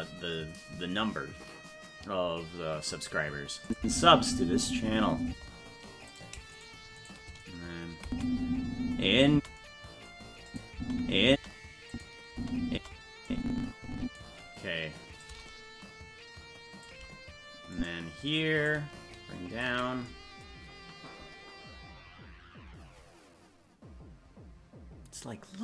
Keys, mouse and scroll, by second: 3.7 click, 3.8 space, 6.2 right click, 6.6 shift+right click, 7.2 right click, 8.1 space, 9.6 space, 10.5 click, 10.7 space, 11.9 click, 12.3 space, 13.3 click, 15.2-16.8 shift+drag, 17.7 click, 18.6-19.6 shift+drag.